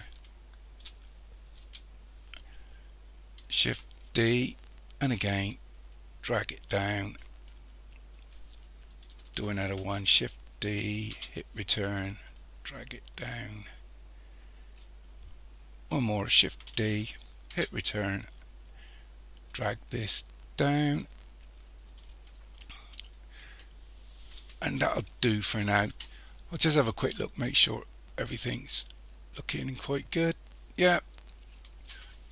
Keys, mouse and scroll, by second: 1.6 KP_1, 4.1 shift+d, 5.9 click, 7.6-9.8 scroll down 1, 9.8 shift+d, 12.4 click, 16.7 shift+d, 19.5 click, 22.0-25.1 shift+middle drag, 26.9-30.0 middle drag.